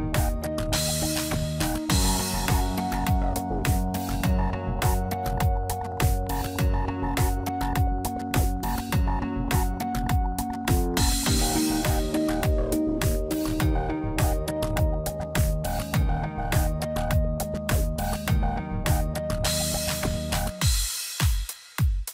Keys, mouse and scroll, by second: 1.2 click, 1.6 click, 2.3 x, 4.2 click, 4.6 middle click, 5.9-6.3 scroll down 1, 6.3 Tab, 7.0 ctrl+a, 8.1 Tab, 8.6 middle click, 9.9 click, 10.2 shift+middle click, 10.6-11.4 scroll up 1, 12.3 click, 13.2 click, 14.0 shift+click, 15.1 shift+click, 17.1 click, 17.6 scroll down 1, 17.9 middle click, 18.6 scroll down 1, 19.1 middle click, 20.4 Tab, 21.4 Tab, 21.7 a.